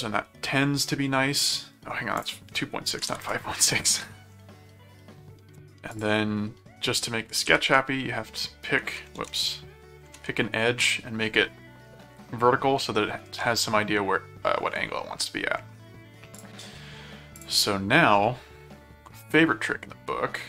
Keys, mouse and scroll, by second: 2.2 click, 5.9 alt+click, 7.5 alt+h, 9.2 ctrl+z, 10.1 alt+v, 16.3 click, 17.3 click.